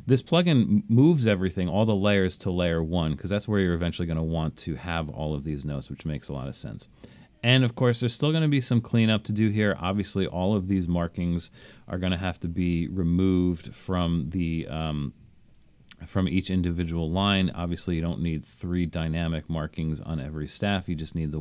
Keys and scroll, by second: 11.7 BackSpace, 13.2 BackSpace, 14.1 BackSpace, 18.6 BackSpace, 19.1 BackSpace, 19.9 BackSpace, 20.5 BackSpace.